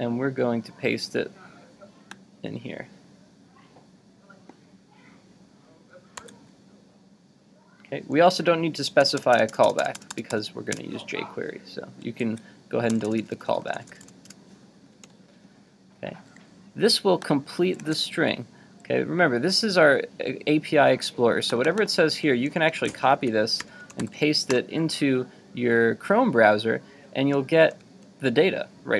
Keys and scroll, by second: 6.2 super+v, 12.3 super+z, 17.8 super+Tab, 22.9 super+c, 23.6 super+t, 24.2 super+v, 27.3 super+-.